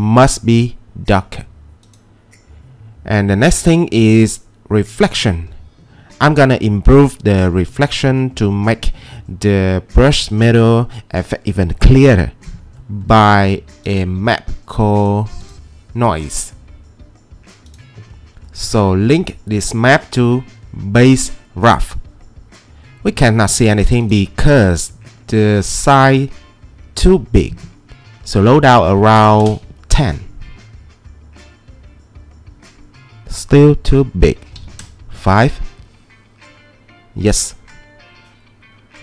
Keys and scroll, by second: 28.7-32.2 typing, 34.5-36.0 typing.